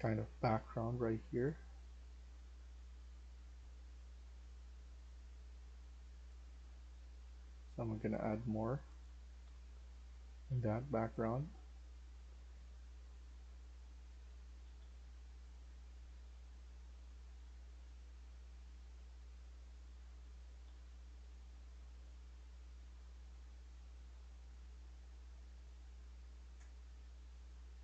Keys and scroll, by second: 3.3-4.0 typing, 5.0 Tab, 8.9-14.7 typing, 16.7-17.8 typing, 19.5-21.3 typing, 25.0 e.